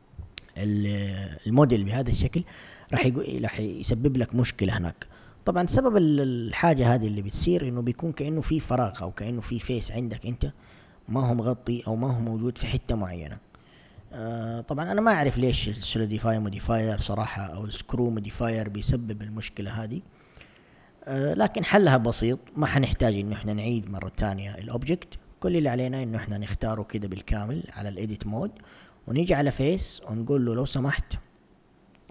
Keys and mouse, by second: 7.9 click, 9.0 Tab, 9.9 a, 14.2 1, 15.0 Tab, 19.7 1, 25.5 Tab, 27.1 a, 27.6 a, 29.2 click.